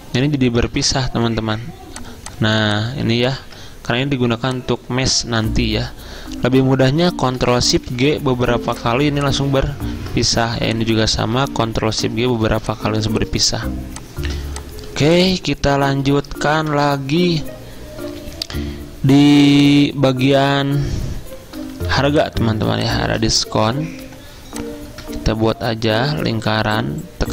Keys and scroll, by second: 0.8 ctrl+z, 5.4 ctrl+z, 10.0 ctrl+shift+z, 16.7 shift+v, 23.6 z, 24.1 l.